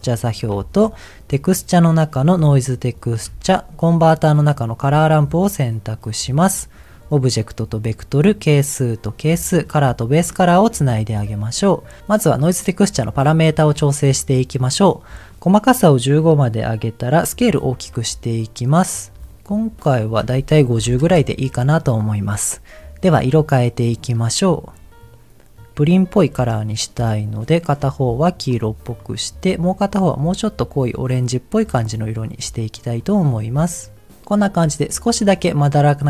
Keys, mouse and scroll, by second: 0.5 shift+a, 3.2 shift+a, 6.9 click, 8.5 click, 9.9 click, 11.2 middle click, 12.8-14.3 scroll up 4, 13.3 middle click, 14.9 click, 17.6-19.8 drag, 20.0-21.1 drag, 24.0 click, 28.5 click, 29.0 click, 31.6 middle click, 32.1-32.7 scroll up 2, 33.0 click, 33.4 click, 34.5 middle click, 35.1 middle click.